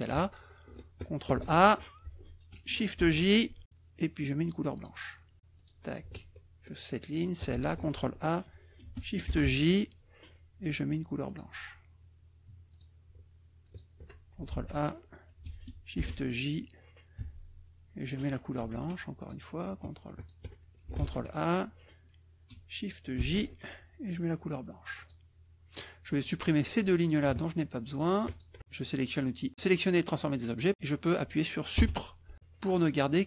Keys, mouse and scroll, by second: 1.3 ctrl+a, 3.0 shift+j, 4.8 click, 5.5 click, 7.1 shift+click, 7.7 ctrl+shift+a, 9.3 shift+j, 11.2 click, 12.7 click, 13.6 shift+click, 14.5 ctrl+shift+a, 15.9 shift+j, 17.1 d, 18.0 click, 18.6 F2, 19.1 click, 20.2 shift+click, 21.0 ctrl+a, 23.2 shift+j, 24.9 click, 26.6 click, 28.3 shift+click, 31.7 Delete, 32.7 click.